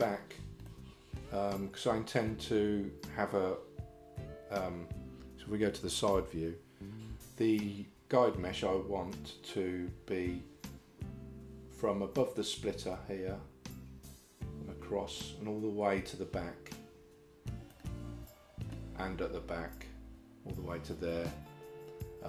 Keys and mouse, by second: 0.7 shift+middle click, 6.2 KP_3, 17.8-18.8 middle drag.